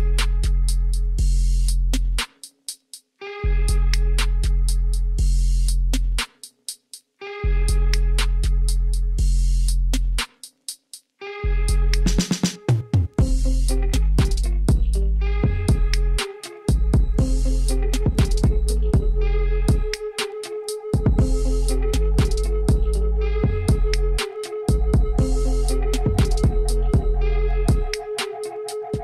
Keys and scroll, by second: 2.7 3, 3.4 Tab, 5.2 shift+z, 6.6 1, 9.4 s, 12.7 o, 14.1 s, 17.3 s, 18.9 y, 22.2 s, 25.3 s.